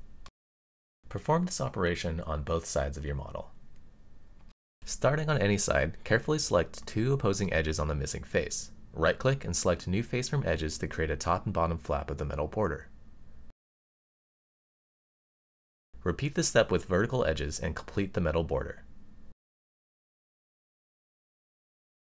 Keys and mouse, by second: 0.2 middle click, 1.9 x, 2.8 middle click, 3.9 click, 5.5 middle click, 7.0 shift+click, 7.5-8.8 right drag, 10.6 middle click, 13.0 right click, 14.7 middle click, 16.4 middle click, 17.4 middle click, 19.5 right click, 20.6 click, 21.0-22.1 middle drag.